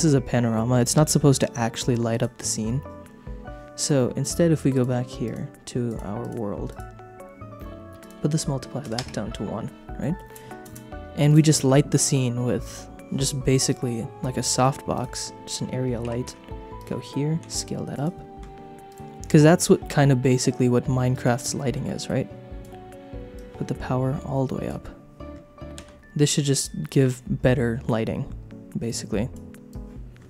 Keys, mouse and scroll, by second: 1.1 middle click, 2.1 click, 4.7 click, 5.9 click, 6.7 click, 8.0-9.0 drag, 10.0 middle click, 11.3 click, 11.6 shift+a, 16.0 g, 16.2 z, 16.8 click, 17.4 s, 17.9 click, 18.9 click, 21.1-22.7 drag, 23.3-24.7 drag, 25.7 KP_0, 28.8 click, 29.7 click.